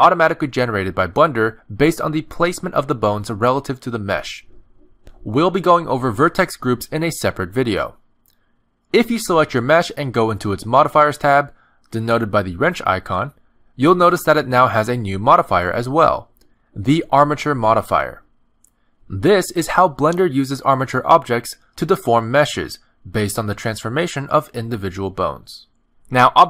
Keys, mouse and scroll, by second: 1.9 click, 2.3 middle click, 2.9 click, 3.3 middle click, 3.8 z, 4.3 r, 8.6 middle click, 9.3 scroll down 1, 9.4 middle click, 10.5 ctrl+Tab, 10.9 click, 14.3 click, 17.7 click, 18.5 click, 20.5 click.